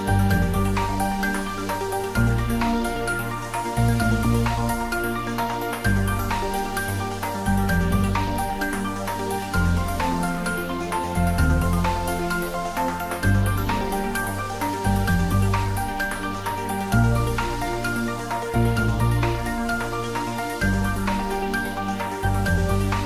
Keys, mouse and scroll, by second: 0.2 z, 2.2 click, 2.5-4.2 middle drag, 4.2 click, 5.1-6.2 scroll down 1, 6.2 g, 6.6 z, 8.8 click, 9.9 middle click, 10.9-12.3 scroll up 1, 13.7 click, 16.9 Tab, 17.6 click, 19.4 click, 19.6 alt+shift+click, 21.1 3, 21.4 click, 22.1 alt+shift+click.